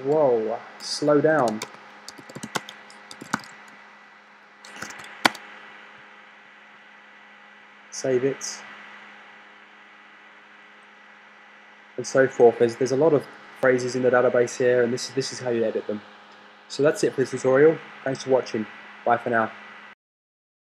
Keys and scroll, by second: 0.3-7.8 typing.